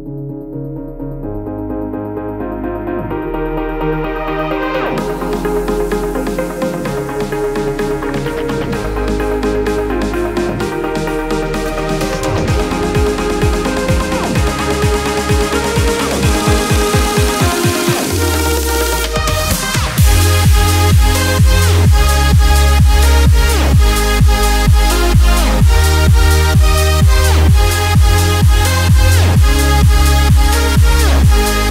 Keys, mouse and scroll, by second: 8.4 space, 8.7 click, 8.9 space, 10.9 space, 11.8 click, 12.2 space, 14.7 typing, 14.8-21.9 drag, 22.4 alt+scroll up 1, 23.5-25.5 alt+drag, 23.8 typing, 25.5-27.9 alt+shift+drag, 28.8 scroll up 1, 29.8 alt+scroll down 1.